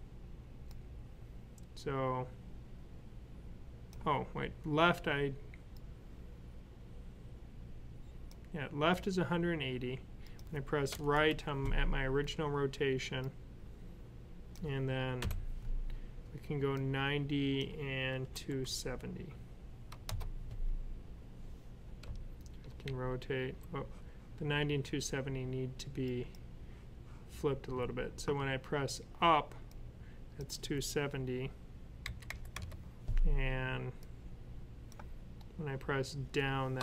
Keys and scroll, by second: 15.1 typing, 17.8-18.6 typing, 21.9 Left, 22.4 Left, 22.5 Left, 22.7 Up, 23.2 Up, 23.3 Up, 23.4 Up, 31.9-32.4 typing, 36.4-36.8 typing.